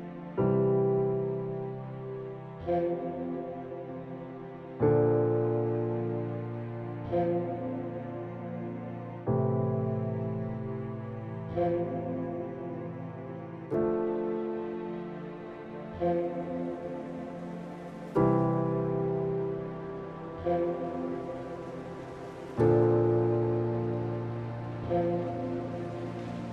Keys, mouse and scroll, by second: 0.3-0.6 scroll up 1, 1.0 shift+middle click, 1.4-2.0 scroll up 2, 2.0 shift+middle click, 2.8 scroll down 1, 4.0 click, 4.7 shift+middle click, 6.1 shift+a, 10.0 alt+g, 10.6-11.6 scroll down 3, 11.6 click, 14.0 Tab, 15.0 s, 17.4-17.9 scroll up 3, 17.9 shift+middle click, 18.6-19.0 scroll up 2, 19.0 shift+middle click, 20.4 click, 21.1 click, 21.6-22.1 scroll down 3, 22.1 shift+middle click, 22.9 click.